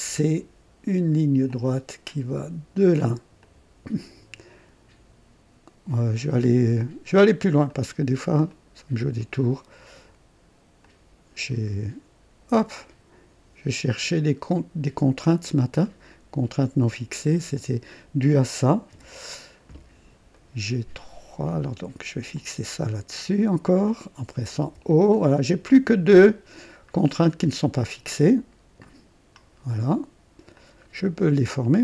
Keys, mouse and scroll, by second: 1.4 click, 3.4 click, 3.5-4.3 typing, 7.6 click, 8.5 right click, 9.2 right click, 10.8 click, 11.5 right click, 12.8 click, 15.3 click, 15.8 right click, 17.5 click, 18.9 o, 20.3 right click, 22.3 click, 23.8 click, 24.6 typing, 26.0 scroll down 2, 27.2 right click, 28.8 click, 30.5-31.8 drag.